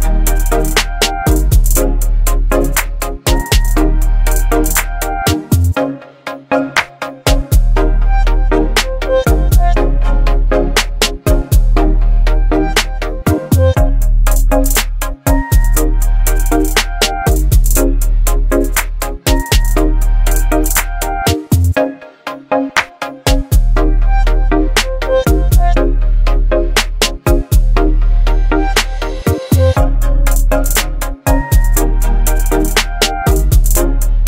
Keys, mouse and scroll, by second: 4.6-6.1 scroll down 1, 13.9 click, 15.6 scroll down 1, 17.7 click, 18.5-19.7 scroll down 1, 22.9-24.3 drag, 26.7-29.0 scroll up 1, 29.8 scroll down 1, 32.7 scroll up 1, 33.1-34.2 drag.